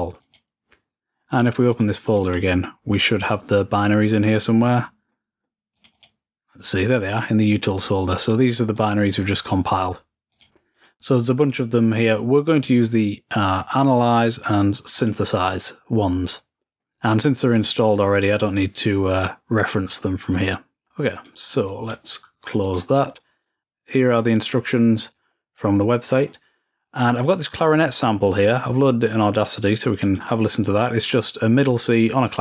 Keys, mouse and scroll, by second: 0.0 click, 1.5-3.0 drag, 5.5-9.8 drag, 10.1-12.2 drag, 13.5 click, 14.7 click, 19.0 click, 20.9 click, 21.5-23.4 drag, 23.5 click, 25.2-25.8 scroll down 2, 25.8-26.7 scroll up 2, 27.0-28.0 drag, 29.1-30.7 drag.